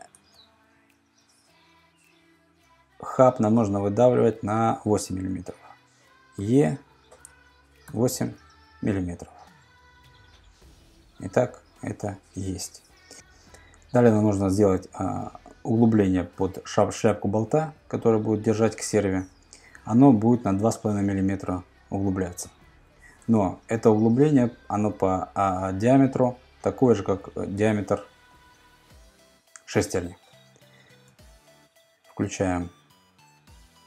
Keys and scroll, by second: 0.2 super+Tab, 5.3 super+Tab, 6.4 e, 9.2 Return, 22.7 super+Tab, 23.3 super+Tab, 31.1 super+Tab.